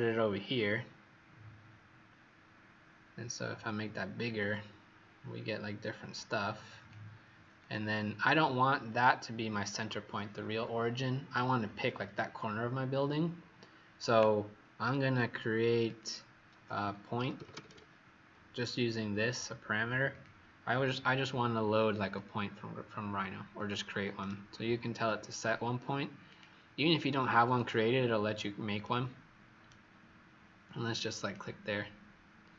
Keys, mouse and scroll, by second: 3.2-3.6 scroll down 1, 3.6 click, 15.9 click, 16.8-18.0 typing, 20.0 click, 20.5 click, 24.1 right click, 26.2 click, 28.7 right click, 31.1 click.